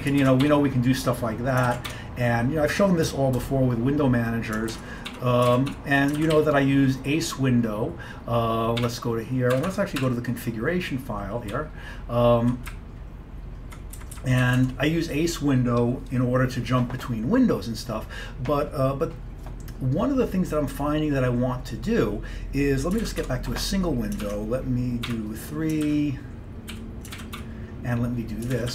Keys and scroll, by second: 0.3 ctrl+x, 0.5 3, 1.7 ctrl+x, 2.0 1, 3.5 BackSpace, 4.8 ctrl+x, 5.2 3, 5.6 ctrl+x, 5.8 2, 6.2 ctrl+x, 6.4 o, 8.6-10.1 typing, 9.6 Escape, 9.7 Escape, 11.6 Page_Up, 12.1-12.8 Page_Up, 12.8 Up, 13.3-14.4 Up, 14.2-14.9 typing, 23.1 ctrl+x, 23.3 1, 24.3 ctrl+x, 25.1 3, 25.9 ctrl+x, 26.8 o, 27.2 ctrl+x, 27.4 2, 28.6 ctrl+x.